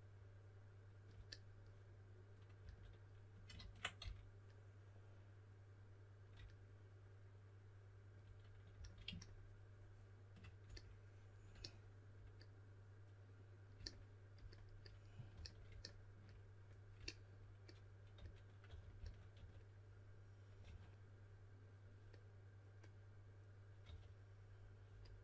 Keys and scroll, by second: 2.5 s, 3.5 super+z, 3.9 s, 8.7 s, 15.3 s, 17.9-20.6 typing, 23.8 typing.